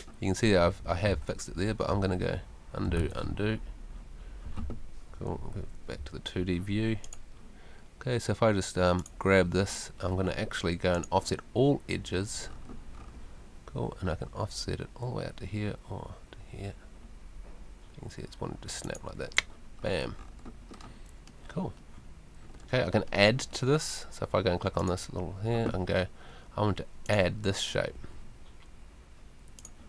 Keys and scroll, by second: 1.1 super+z, 3.0 super+z, 5.5 F2.